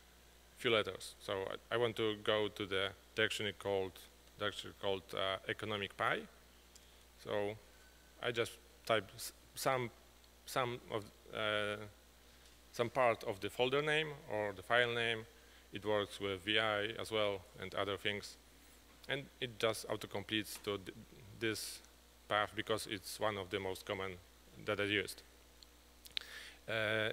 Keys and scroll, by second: 0.0-1.3 typing, 6.9 Return.